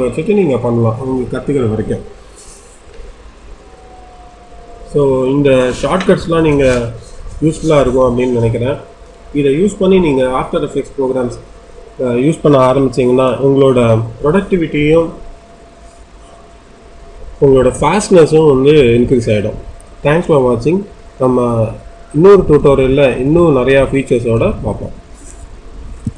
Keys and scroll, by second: 25.9 F10.